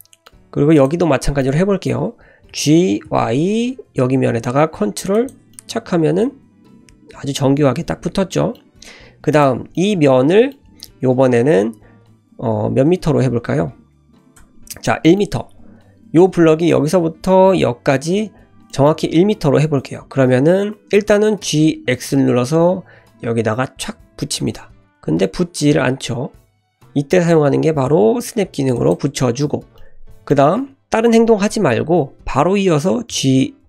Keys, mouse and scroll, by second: 0.7 click, 1.4-2.5 middle drag, 2.5 g, 5.5-8.5 middle drag, 9.3 click, 9.7 middle click, 10.5-12.5 scroll up 2, 12.9 Tab, 14.4 Tab, 14.8-17.4 middle drag, 18.7-20.2 middle drag, 21.4 g, 29.5-30.3 scroll down 2, 29.8 middle click, 33.1 g.